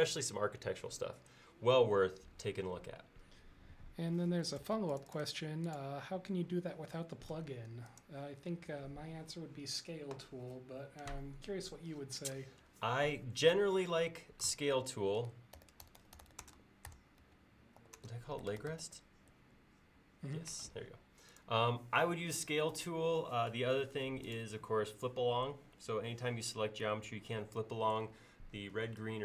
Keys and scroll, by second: 4.7 space, 7.3 g, 8.7 g, 15.4-19.3 typing.